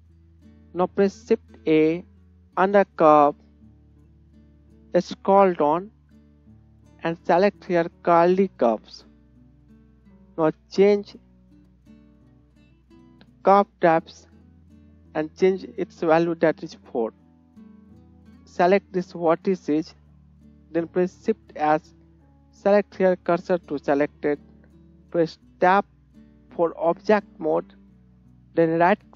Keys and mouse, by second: 1.4 shift+a, 16.8-18.3 drag, 16.8-18.8 middle drag, 16.8-18.3 right drag, 21.2 shift+s, 26.0 Tab, 26.8-28.5 middle drag.